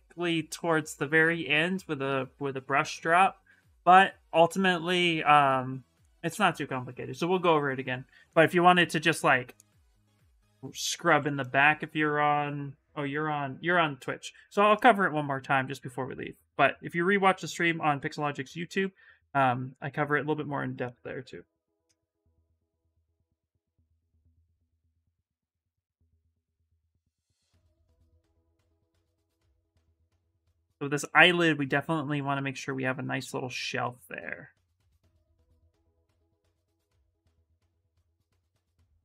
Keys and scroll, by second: 10.0 s, 15.1 s, 22.0 s, 33.0 s, 36.8 s.